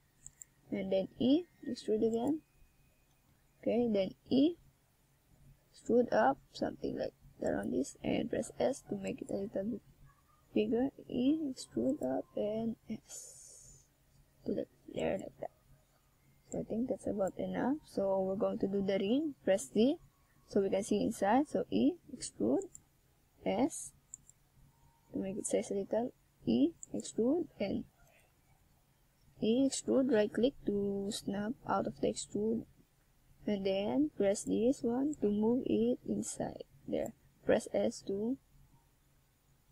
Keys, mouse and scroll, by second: 0.8 click, 1.1 right click, 3.4 click, 6.7 right click, 7.4 right click, 8.4 click, 10.3 click, 13.5 click, 15.7 right click, 16.6 right click, 17.4 right click, 19.1 scroll down 1, 20.4 right click, 21.3 click, 24.5 right click, 25.2 shift+right click, 26.1 right click, 26.9 right click, 27.1 shift+right click, 28.4 right click, 29.8 click, 31.9 middle click, 33.3 click, 34.4 right click, 34.9 click, 36.3 click, 37.6 click, 38.7 KP_7.